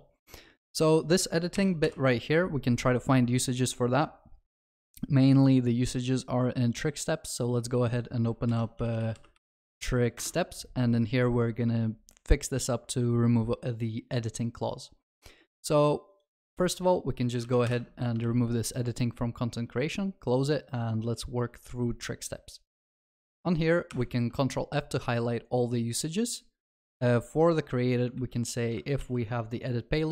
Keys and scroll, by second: 1.8 alt+F7, 8.5 ctrl+shift+n, 17.7 ctrl+y, 21.8 ctrl+s, 23.9 ctrl+f, 28.2 ctrl+c, 29.0 ctrl+s.